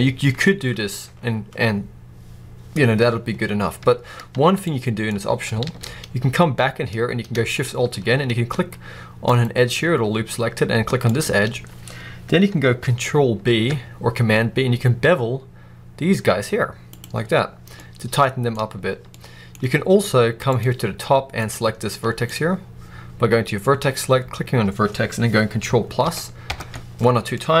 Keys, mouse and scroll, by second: 3.6 Tab, 4.7 middle click, 5.6 alt+a, 5.9-9.1 scroll up 1, 9.1 alt+shift+click, 10.9 click, 13.4 ctrl+b, 16.9 click, 17.1 scroll down 1, 17.6-20.4 middle drag, 18.4-19.0 scroll up 1, 20.4 click, 21.3 click, 21.8-25.9 middle drag, 25.9 ctrl+KP_Add, 27.2 middle click.